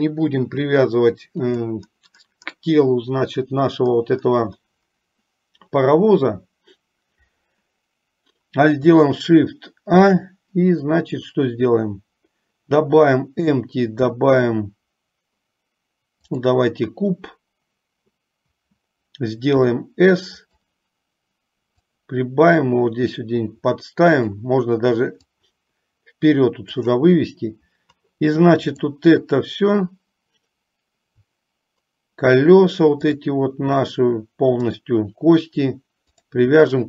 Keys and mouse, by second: 10.0 shift+a, 19.6 s, 21.9-24.8 drag, 25.4-27.2 drag, 33.1 shift+click, 34.9 shift+click, 36.3 shift+click.